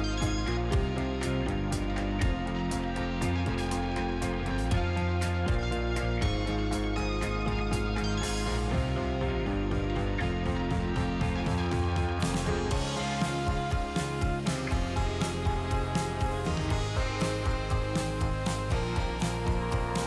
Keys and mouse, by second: 0.3 ctrl+z, 0.4 ctrl+z, 0.8 middle click, 2.3 ctrl+z, 2.5 click, 2.9 click, 4.0 click, 5.4 ctrl+z, 8.4 click, 9.0 click, 9.4 ctrl+z, 9.9 ctrl+z, 10.1 click, 11.0 click, 11.5 ctrl+z, 12.0 click, 12.4 ctrl+z, 12.9 ctrl+z, 13.5 click, 13.8 ctrl+z, 14.4 ctrl+z, 14.8 middle click, 15.4 click, 16.1 click, 16.5 click, 16.8 click, 17.2 middle click, 18.0 middle click, 18.4 middle click, 19.9 click.